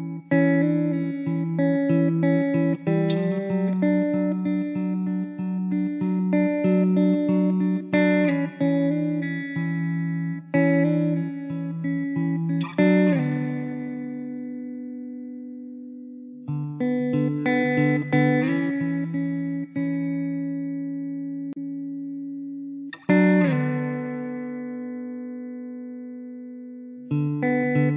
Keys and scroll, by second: 3.4 Tab, 3.8 alt+z, 6.5 Tab, 7.3 Tab, 9.2 Tab, 9.4 alt+z, 10.0 `, 10.2 Tab, 10.6 alt+z, 14.5 Tab, 15.3 Tab, 16.0 alt+z, 18.6 x, 19.6 1, 24.7 alt+z, 25.0 Tab.